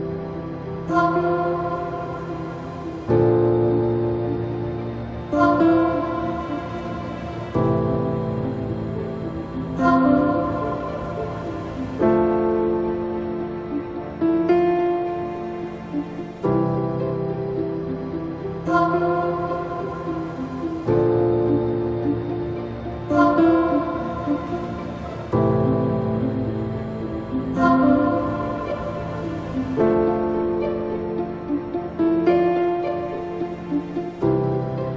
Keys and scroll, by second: 4.4 space, 16.7 ctrl+z, 18.7 space, 28.6 ctrl+d.